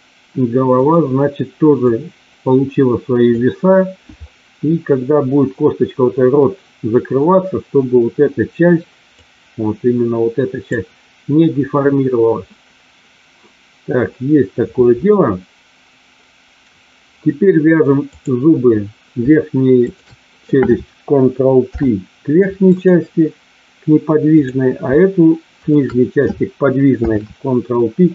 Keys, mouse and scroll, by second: 0.7 click, 1.8-3.2 drag, 9.1-10.7 drag, 18.1 click, 19.8 shift+click, 21.6 ctrl+p, 24.3 click, 25.6 shift+click, 26.8 ctrl+p.